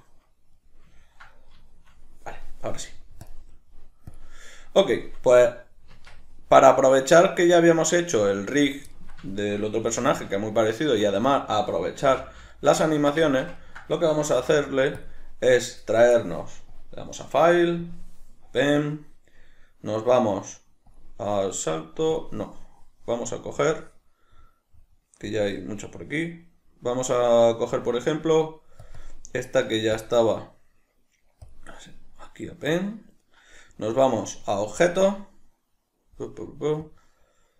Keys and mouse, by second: 3.3-8.9 drag, 5.9 Tab, 8.9-9.9 ctrl+middle drag, 9.9 alt+q, 10.4 ctrl+middle click, 11.0 a, 12.0 shift+c, 12.9-16.7 ctrl+middle drag, 14.3 ctrl+s, 16.7-37.5 drag.